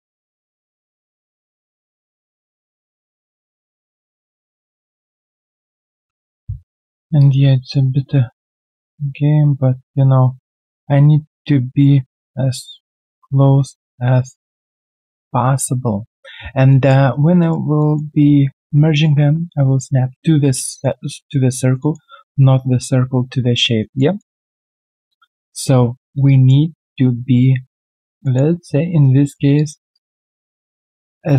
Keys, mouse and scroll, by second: 2.8 alt+middle click, 3.0 alt+right click, 3.3 alt+middle click, 3.5 alt+right click, 3.8 alt+middle click, 4.2 middle click, 6.2 alt+middle click, 7.5 alt+right click, 8.7 middle click, 10.8 middle click, 12.1-12.4 scroll down 1, 13.6 middle click, 15.0 middle click, 15.2 alt+right click, 16.7 alt+middle click, 17.1 right click, 20.5 alt+middle click, 21.8 alt+middle click, 23.1-23.8 alt+scroll down 1, 23.8 alt+right click, 24.1 alt+middle click, 24.8 alt+click, 26.2 alt+right click, 26.7 alt+middle click, 27.8 scroll down 1, 28.2 alt+middle click, 30.2 alt+middle click, 30.5 alt+right click, 30.9 alt+middle click.